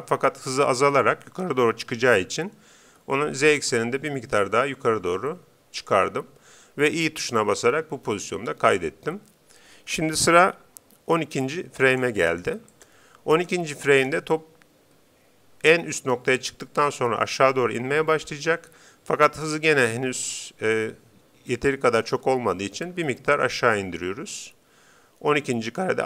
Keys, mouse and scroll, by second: 2.9 g, 7.7 i, 11.9-15.7 drag, 22.2 g.